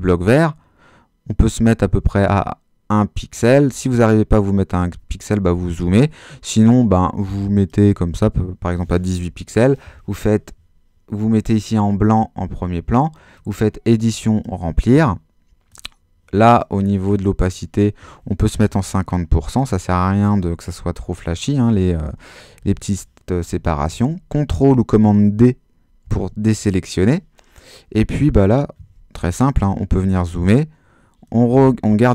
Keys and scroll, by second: 18.3-19.1 typing, 19.4 Return, 26.0 super+d, 29.1 super++.